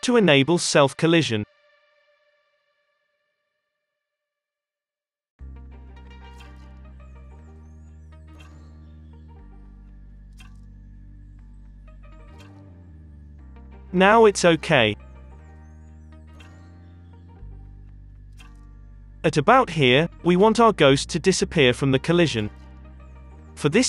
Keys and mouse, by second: 5.4 space, 6.5 space, 7.2-8.2 middle drag, 7.9 ctrl+s, 8.2 space, 8.3 middle click, 10.4 middle click, 12.0-13.0 middle drag, 13.7-14.9 middle drag, 15.7 space, 15.7-17.1 middle drag, 17.1-19.0 drag.